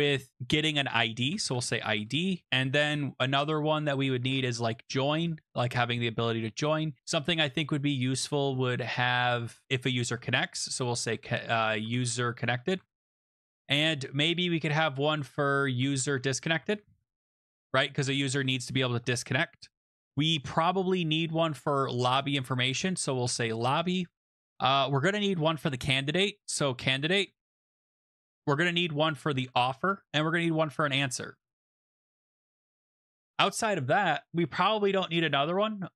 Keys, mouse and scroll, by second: 1.0-1.9 typing, 2.1 Return, 3.9-5.3 typing, 9.8-13.7 typing, 15.5-23.7 typing, 26.1-32.8 typing.